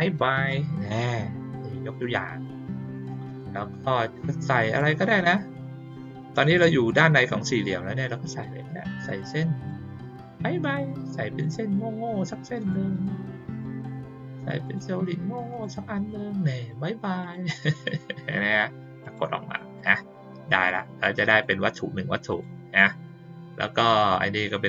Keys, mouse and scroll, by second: 1.8 click, 2.9 click, 4.7 click, 8.2 click, 9.6-11.4 drag, 12.5 click, 13.4 click, 14.6 click, 15.4 click, 17.2 click, 19.0 click, 19.7 click, 20.6 click, 21.2 click, 22.2 click, 22.7 click.